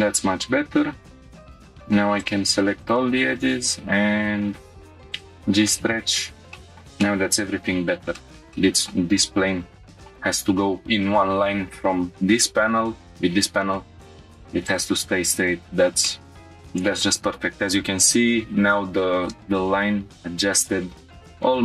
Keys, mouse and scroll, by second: 1.4-2.8 alt+drag, 3.3 right click, 6.5 scroll up 2, 6.5 shift+middle click, 7.0 middle click, 7.6-8.1 scroll up 3, 8.1 shift+middle click, 8.5 middle click, 9.8 scroll down 1, 11.3-11.8 scroll down 3, 14.7 click, 15.3-15.9 scroll up 3, 16.0 shift+middle click, 16.3 scroll down 2.